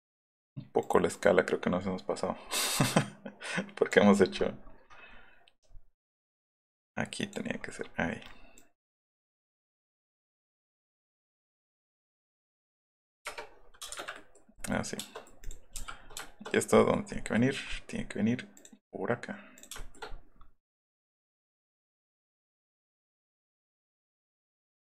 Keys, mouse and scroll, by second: 0.8 click, 1.0 click, 1.8 middle click, 6.3-7.3 drag, 8.6 click, 13.8 space, 13.8 middle click, 13.9 Escape, 14.7 middle click, 15.4 middle click, 20.7 click, 22.1 click, 23.2 click, 24.5 click.